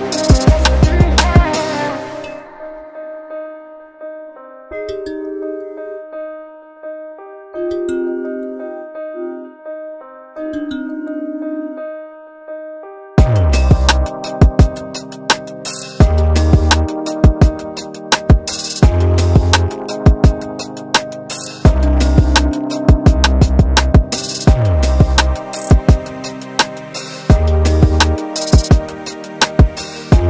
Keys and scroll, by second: 1.8 /, 2.2 5, 2.3 Return, 3.9 space, 7.4 Delete, 8.7 ctrl+z, 15.0 Delete, 17.0 space, 19.4 q, 29.7 space.